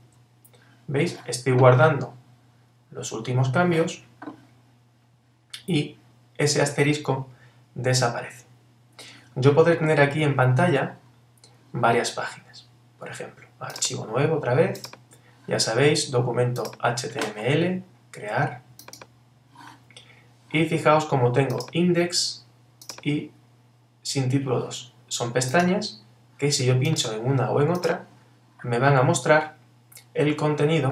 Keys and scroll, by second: 0.0 super+s.